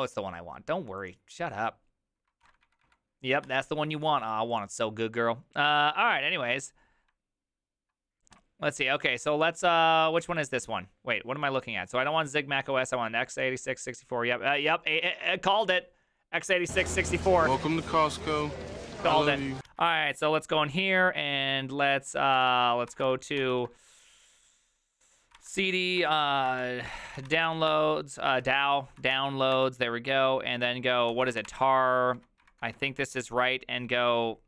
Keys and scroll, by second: 2.4 alt+r, 2.7 Right, 2.8 Right, 3.5 Escape, 19.7 alt+{, 21.9-23.4 typing, 22.3 ctrl+c, 22.5 ctrl+c, 25.3-27.9 typing, 28.4 Up, 29.0-31.8 typing, 29.1 Tab, 32.1 ctrl+Left, 32.4 ctrl+Right, 32.6 ctrl+w, 32.7 ctrl+w, 32.9 ctrl+w.